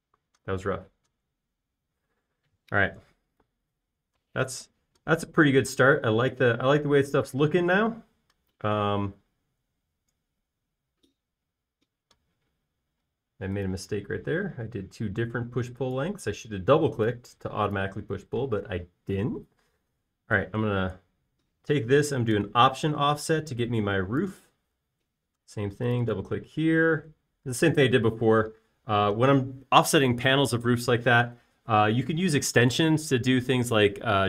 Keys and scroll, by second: 12.3 space, 13.9-14.5 typing, 18.5 e, 20.0-20.9 typing, 29.6 l, 32.2 typing.